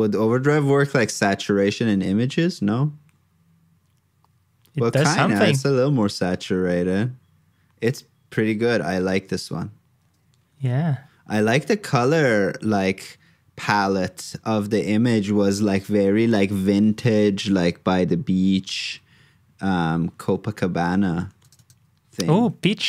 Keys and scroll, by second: 10.5 super+Tab.